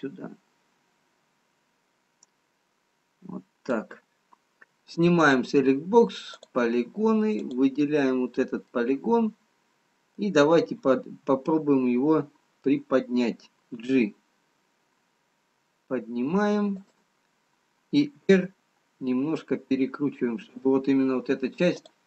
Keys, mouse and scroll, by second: 5.8 click, 6.5 click, 9.2 click, 9.2 middle click, 11.6 middle click, 14.2 g, 18.1 r.